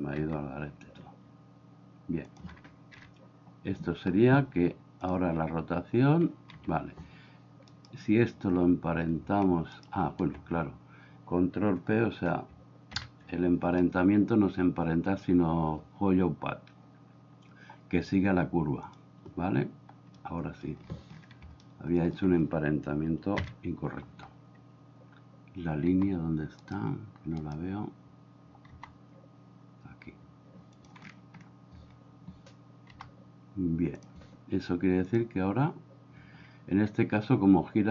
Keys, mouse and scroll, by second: 0.2 g, 2.9 KP_7, 5.1 click, 6.6 Escape, 12.9 ctrl+p, 20.1-20.7 middle drag, 21.8 middle click, 23.4 KP_7, 25.9 g, 28.8 g, 33.0 g, 35.1 click.